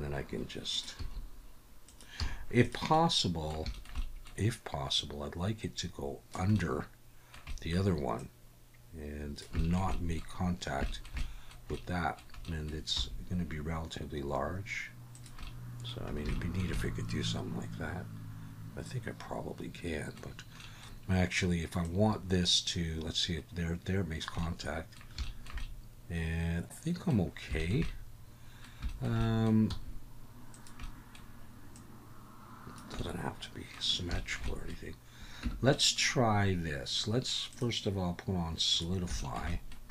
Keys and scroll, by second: 1.9 s, 2.2 z, 13.0 s, 29.7 s, 35.4 Tab.